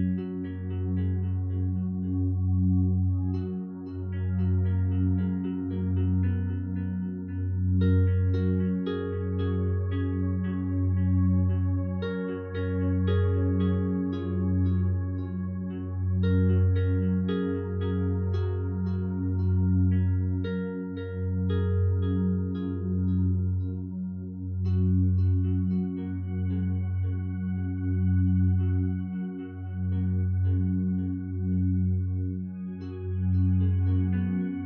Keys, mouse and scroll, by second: 5.8 1, 6.2 2, 7.7 Return, 17.8 Escape.